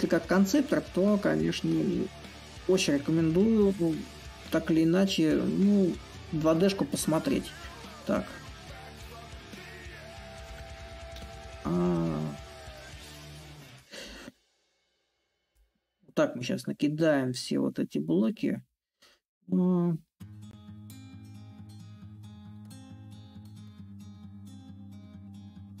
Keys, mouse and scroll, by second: 0.0-5.0 drag, 6.0-7.6 drag, 8.5-12.9 ctrl+drag, 12.9 ctrl+z, 13.8-18.8 ctrl+drag, 20.8-25.8 ctrl+drag.